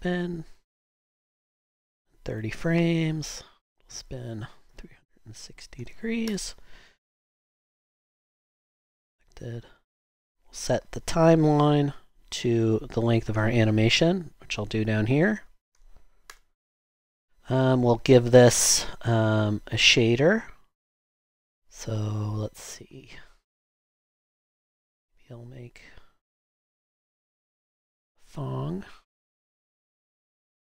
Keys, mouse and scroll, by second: 5.1-6.3 typing, 15.4-15.7 typing, 16.3 Return, 18.8 typing, 21.1 typing, 23.2 typing.